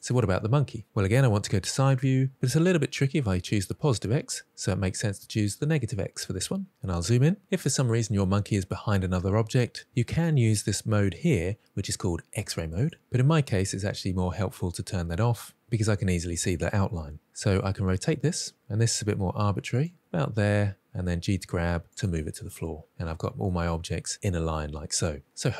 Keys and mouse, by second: 5.1 click, 12.3 click, 14.7 click, 17.5 r, 19.4 click, 19.7 g, 22.3-22.7 middle drag, 23.4 middle click.